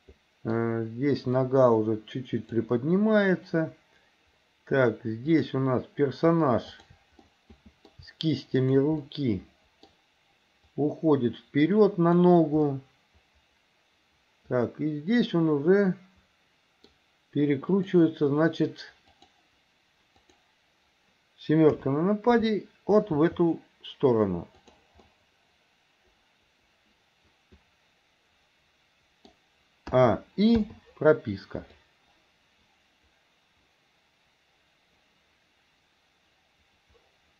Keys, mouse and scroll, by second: 0.6 scroll down 2, 1.4-2.7 drag, 5.3 click, 6.8 shift+click, 7.2-8.0 middle drag, 8.6 shift+click, 9.1-9.9 middle drag, 10.8-12.3 drag, 12.7-16.9 middle drag, 17.7 click, 19.1 click, 20.3 click, 21.8 KP_7, 23.2 r, 25.1-29.3 middle drag, 30.0 a, 30.7 i, 31.8-37.3 drag.